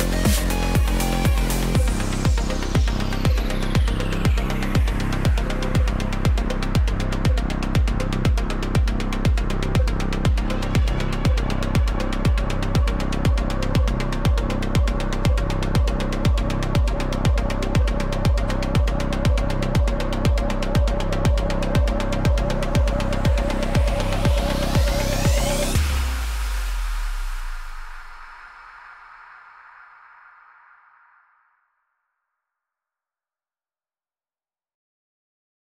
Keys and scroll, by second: 0.9 ctrl+v, 11.6 ctrl+v, 15.0 ctrl+z, 16.1 ctrl+t, 22.1 ctrl+0.